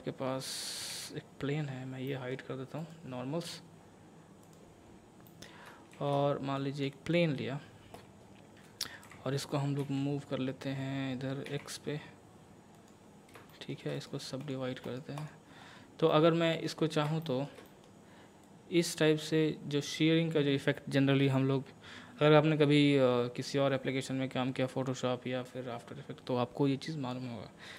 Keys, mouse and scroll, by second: 0.8 a, 2.1 middle click, 2.2-2.8 scroll down 1, 2.8 click, 3.5 scroll down 1, 4.4 click, 5.3 middle click, 5.9 shift+a, 6.6 click, 9.0 g, 11.5 x, 12.7 click, 13.1 scroll up 1, 13.5 shift+middle click, 14.0 right click, 14.4 click, 14.8 right click, 15.2 click, 15.6-16.1 scroll up 1, 16.1 middle click, 16.8 scroll up 1, 17.2 shift+middle click, 18.4-27.4 drag, 27.4 scroll down 1.